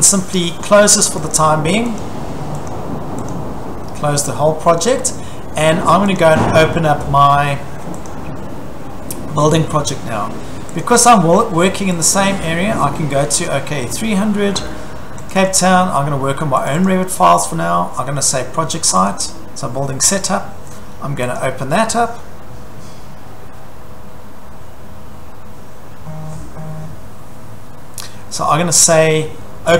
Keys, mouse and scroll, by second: 1.3 click, 2.0 click, 2.7 click, 3.3 click, 6.2 click, 8.1 click, 10.8 click, 12.0 click, 13.5 click, 15.3 click, 15.5 click, 16.7 click, 16.9 click, 19.1 click, 21.4 click.